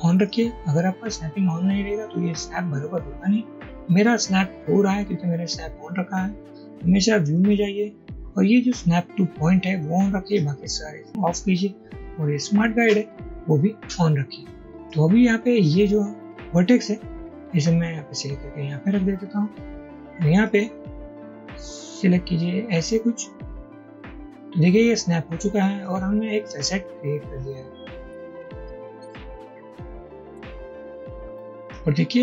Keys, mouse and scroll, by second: 20.4 click, 23.5-24.5 drag, 31.6 shift+click.